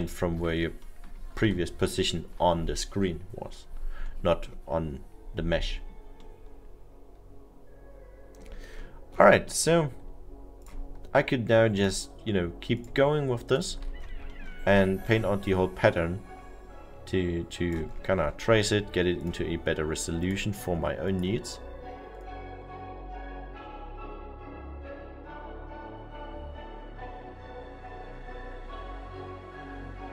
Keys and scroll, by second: 0.2 ctrl+z, 2.3 ctrl+z, 23.2 ctrl+z.